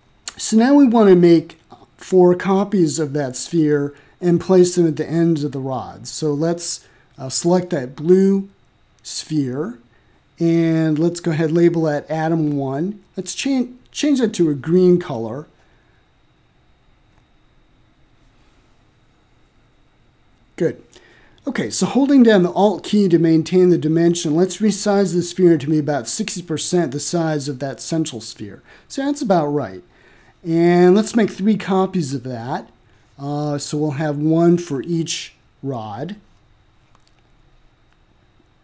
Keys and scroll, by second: 4.7-6.6 typing, 6.6 Return.